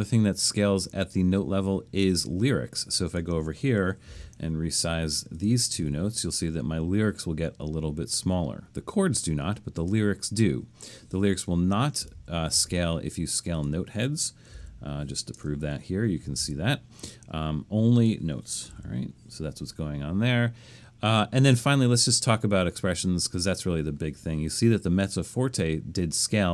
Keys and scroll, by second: 3.8-6.3 typing, 12.1 super+z, 12.5 super+z, 14.3-15.1 typing, 16.4 super+z, 18.4-19.2 typing.